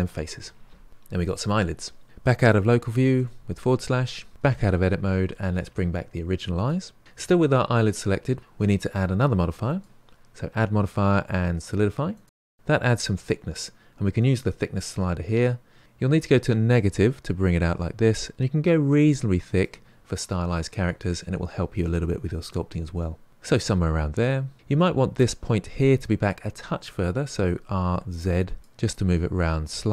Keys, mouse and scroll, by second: 3.1 KP_Divide, 4.1-6.5 scroll down 3, 6.5 click, 14.1-15.8 drag, 23.0 middle click, 24.4-27.0 middle drag, 27.4 r, 28.9-29.9 middle drag.